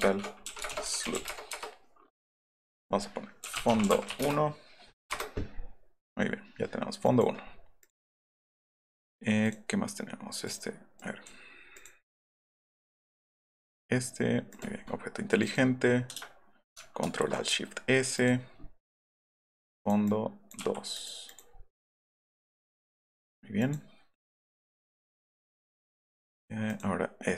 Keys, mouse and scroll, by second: 0.2-1.6 typing, 3.2-4.6 typing, 7.1 click, 7.8 click, 9.4 click, 10.4 click, 10.9-11.2 drag, 11.7 click, 12.3 click, 12.6 click, 13.7 right click, 14.5 click, 14.6 right click, 15.3 click, 15.5 click, 18.2 click, 19.0 click, 19.3 click, 19.7 click, 20.0 click, 20.6 2, 20.9 click, 21.2 click, 22.5 click, 23.6 click, 24.3 click, 24.5 click, 26.3 click, 26.6 click.